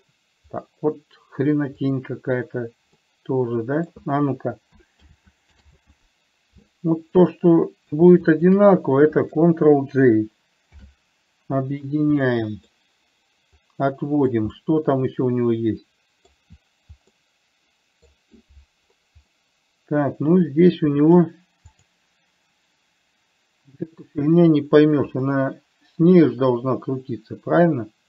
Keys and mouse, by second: 3.3-4.3 middle drag, 5.3 ctrl+z, 6.0 ctrl+z, 7.5-8.3 middle drag, 8.6 click, 11.1 ctrl+j, 12.7 middle click, 14.0-14.6 drag, 15.0-16.6 middle drag, 17.5-18.5 middle drag, 19.7-21.6 middle drag, 22.1 click, 25.6-28.0 middle drag.